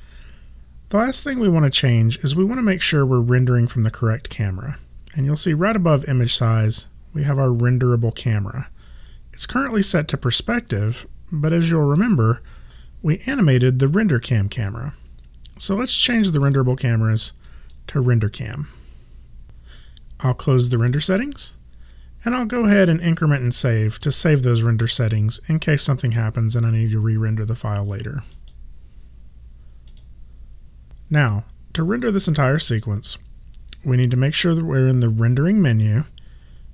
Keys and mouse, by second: 11.0 click, 16.4 click, 20.9 click, 24.0 click, 28.3 click.